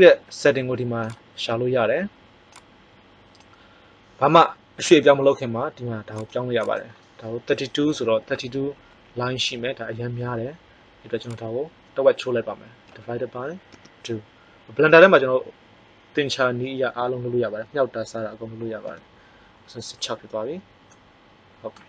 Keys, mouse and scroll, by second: 1.0 click, 1.2-2.8 drag, 6.1 click, 20.9 middle click.